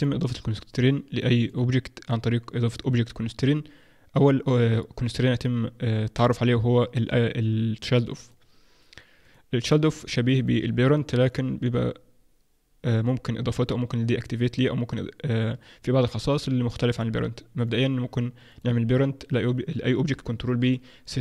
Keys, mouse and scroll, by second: 9.2 click, 9.6 click, 17.6 click, 18.5 shift+click, 20.4 ctrl+p.